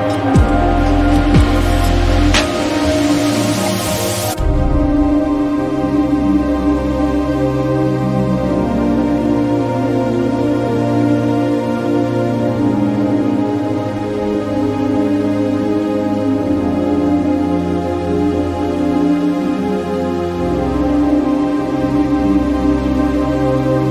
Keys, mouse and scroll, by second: 5.3 click, 8.4 click, 9.7-14.8 ctrl+drag, 14.8 right click, 16.7 click, 19.3 click, 20.0-23.9 ctrl+drag.